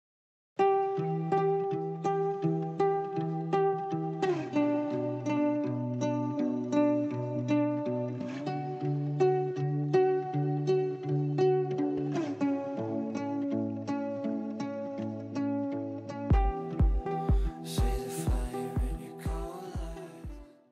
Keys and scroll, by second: 10.8 g.